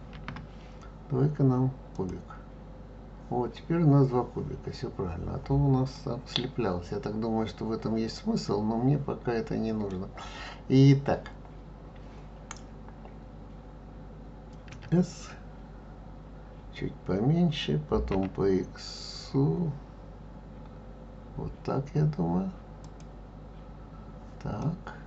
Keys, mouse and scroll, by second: 0.1 shift+a, 5.9-8.9 middle drag, 14.7 s, 24.6-25.0 middle drag.